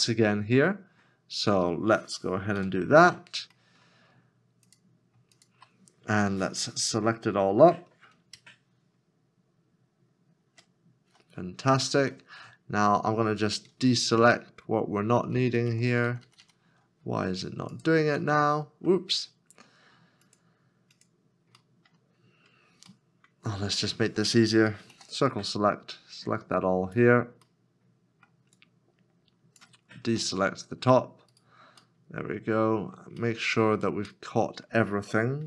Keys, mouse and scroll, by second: 0.0 scroll down 1, 0.3 middle click, 0.4-2.4 scroll up 1, 2.7 /, 3.6 middle click, 5.4 shift+click, 11.7 scroll down 1, 12.4 middle click, 14.2 ctrl+KP_Subtract, 15.2 ctrl+KP_Subtract, 15.4 ctrl+KP_Subtract, 15.7 ctrl+KP_Subtract, 15.9 ctrl+KP_Subtract, 16.1 ctrl+KP_Subtract, 16.2 ctrl+KP_Subtract, 16.4 ctrl+KP_Subtract, 18.2 middle click, 21.6 middle click, 22.4-22.9 scroll up 1, 23.0 middle click, 24.9 c, 27.5 middle click, 31.3 right click, 32.0 middle click.